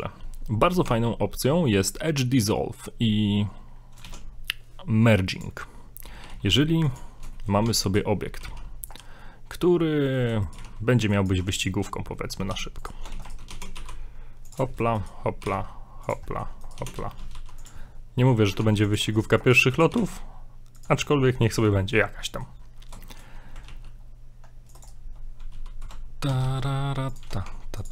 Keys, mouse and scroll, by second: 0.9 Tab, 4.0 shift+a, 6.2 g, 7.4 shift+middle click, 7.7 Tab, 7.9 right click, 8.4 g, 9.2 middle click, 10.4 right click, 10.5 right click, 10.6 g, 11.5 middle click, 11.9 middle click, 12.0 scroll up 2, 12.2 middle click, 12.5 e, 13.1 ctrl+z, 13.2 right click, 13.5 e, 14.7 shift+middle click, 14.9 shift+middle click, 15.1 right click, 15.4 right click, 15.6 g, 16.3 shift+middle click, 16.8 right click, 16.9 e, 17.8 middle click, 18.6 ctrl+Tab, 19.1 right click, 19.4 right click, 19.9 right click, 21.0 shift+middle click, 21.4 middle click, 22.1 scroll down 2, 23.0 shift+middle click, 23.7 ctrl+r, 26.3 s, 27.5 ctrl+Tab.